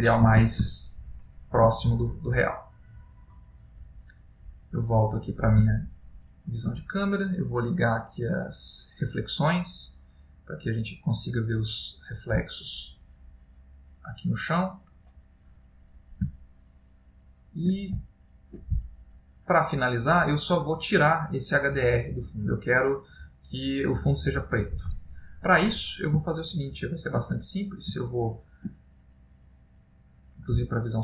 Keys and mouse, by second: 0.8 ctrl+middle click, 1.9 middle click, 4.5 click, 5.9 ctrl+middle click, 16.7 shift+middle click, 25.7 middle click, 26.5 ctrl+middle click, 27.4 middle click, 28.2 ctrl+middle click, 29.9 click, 30.7 shift+middle click.